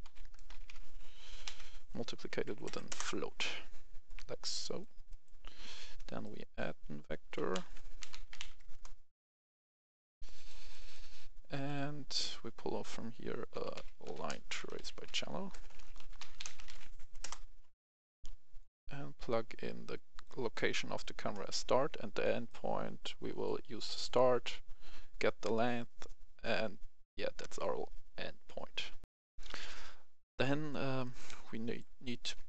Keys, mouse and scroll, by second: 0.0-0.6 typing, 2.4 Up, 2.6 Up, 2.8 Return, 4.0 click, 5.0 right click, 6.1 click, 8.0-8.3 typing, 8.7 Return, 9.7 click, 11.5 right click, 12.2 click, 13.5-16.6 typing, 17.1 Return, 18.1-20.5 drag, 20.5 right click, 22.4-23.5 drag, 29.0 F10, 29.5 right click, 31.0 click.